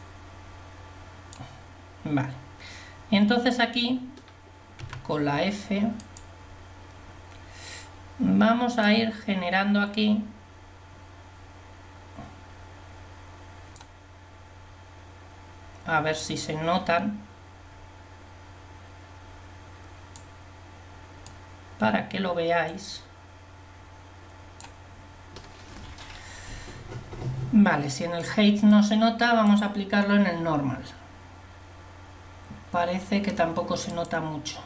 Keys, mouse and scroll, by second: 6.1 f, 16.2-18.7 drag, 21.5 click.